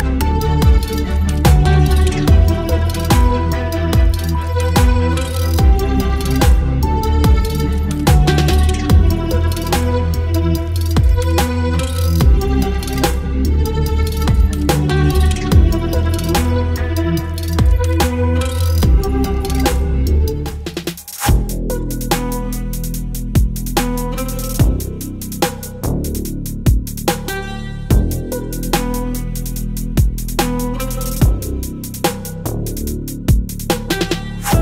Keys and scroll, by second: 0.3 ctrl+t, 1.1 Return, 1.5 space, 2.1 l, 2.4 space, 4.8 Delete, 6.1 space, 7.5 ctrl+BackSpace, 11.0 space, 14.8 ctrl+BackSpace, 16.6 Delete, 17.9 Delete, 19.3 Delete, 20.1 space, 21.2 space, 22.3 Delete, 23.9 Delete, 25.3 ctrl+BackSpace, 27.4 space, 27.6 v, 28.9 Delete, 31.1 ctrl+BackSpace, 32.8 space, 34.3 Delete.